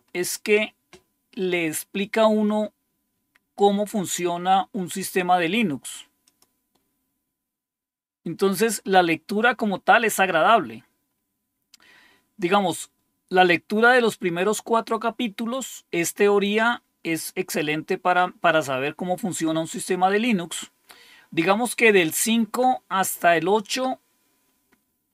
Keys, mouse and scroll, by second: 6.2 click, 8.4 click, 10.9-11.8 scroll down 2, 13.1-13.9 scroll down 2, 19.6 scroll down 1, 20.4-24.0 scroll down 5, 24.4-25.1 scroll up 3.